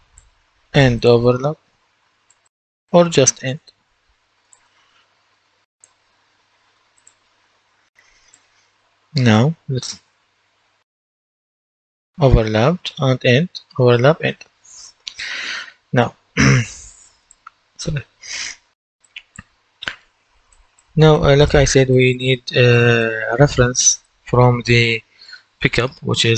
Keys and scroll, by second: 1.8-3.1 typing, 3.3 Return, 8.6 typing, 12.1-14.6 typing, 14.7 Escape, 20.1 Delete, 21.4 Delete.